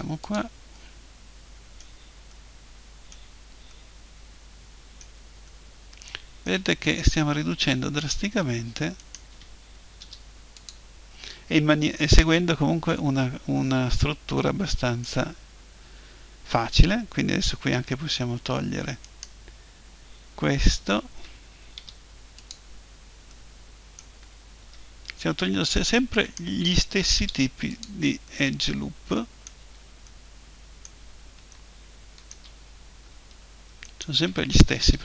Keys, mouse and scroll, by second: 0.7-2.9 drag, 3.0-9.0 middle drag, 9.0-10.8 right drag, 10.0 Delete, 12.1-15.5 middle drag, 19.1-21.0 right drag, 21.8 Delete, 23.3-25.3 middle drag, 26.1-28.1 right drag, 27.2 Delete, 27.9 middle click, 28.3-33.4 middle drag, 33.8-34.8 right drag, 34.8 Delete.